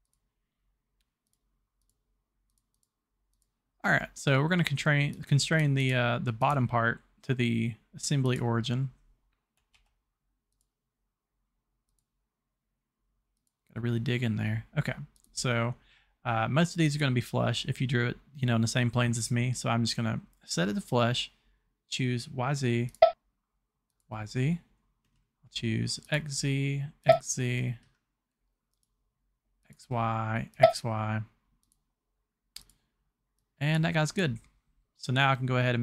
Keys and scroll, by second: 9.8 c.